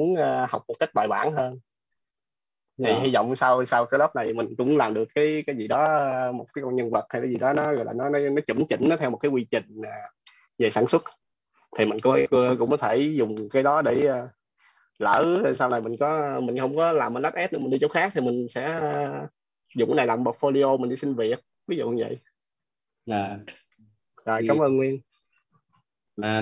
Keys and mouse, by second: 1.6 click, 22.6 click.